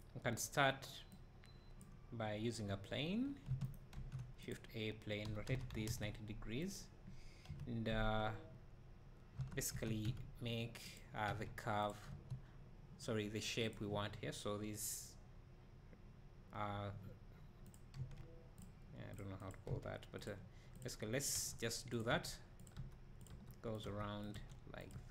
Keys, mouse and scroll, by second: 2.7 scroll down 2, 3.3-3.7 scroll up 1, 3.7 shift+right click, 5.4 r, 7.5 KP_Decimal, 9.4 Tab, 9.8 1, 11.0 click, 11.3 x, 13.7-17.7 drag, 18.0 x, 19.2 click, 20.3 x, 20.8 click, 21.4 e.